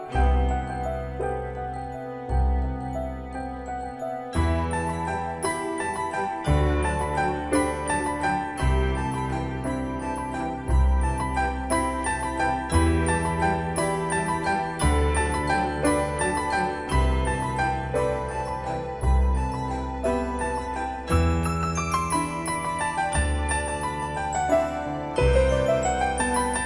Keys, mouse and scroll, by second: 5.4 click, 11.0-11.8 typing, 11.8 Return, 13.8 typing, 16.0 click, 23.7 typing.